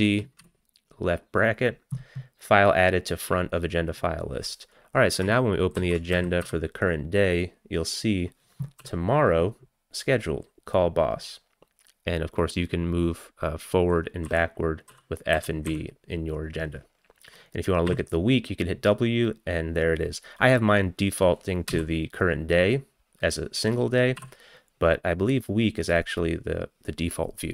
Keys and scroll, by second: 0.4 [, 5.8 ctrl+c, 6.2 a, 6.5 a, 8.9 f, 14.3-16.2 typing, 17.9 w, 21.7 d, 24.2 w.